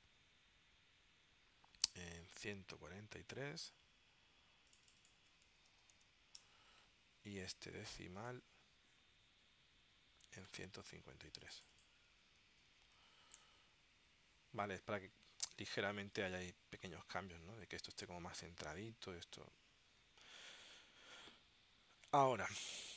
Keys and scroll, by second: 5.4-6.5 typing, 6.6 Tab, 12.3-13.6 typing.